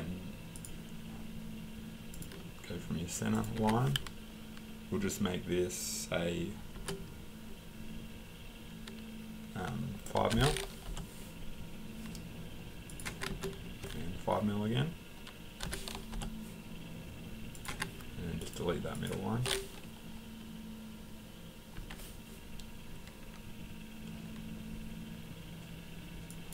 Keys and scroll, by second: 3.6 Escape, 10.2 5, 10.9 Return, 13.1 Escape, 15.6 5, 16.1 Return, 17.7 Escape, 17.7 typing, 21.8 Delete.